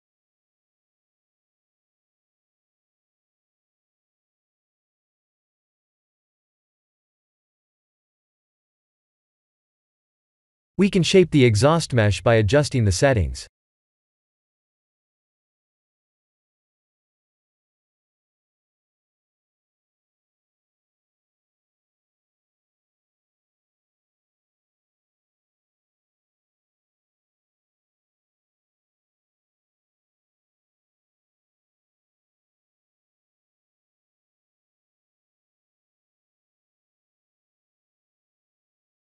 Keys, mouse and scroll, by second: 0.4 shift+middle click, 1.2 shift+middle click, 1.9 shift+middle click, 6.2 click, 6.6 click, 7.4 click, 12.9 click, 15.9 click, 21.1 click, 23.5 click, 26.6 click, 30.1 click, 34.1 click.